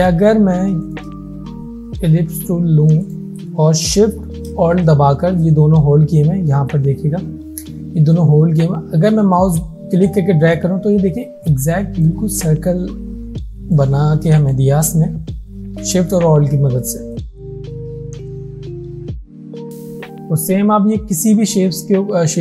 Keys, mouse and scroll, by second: 0.9 right click, 3.1 click, 9.5-12.2 alt+shift+click, 13.3 space, 13.8 click, 13.8-14.7 space, 14.7 space, 17.2-17.9 alt+shift+drag, 19.5 alt+scroll down 2, 19.7 alt+shift+click, 20.5 right click, 21.2 click, 21.4 space, 21.6 click, 21.9 space.